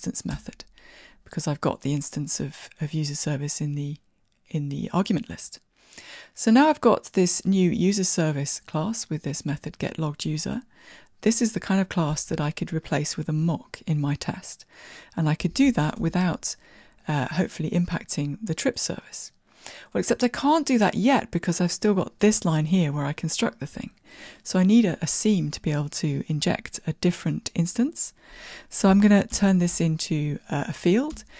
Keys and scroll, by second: 15.5 super+e, 29.4 alt+super+f.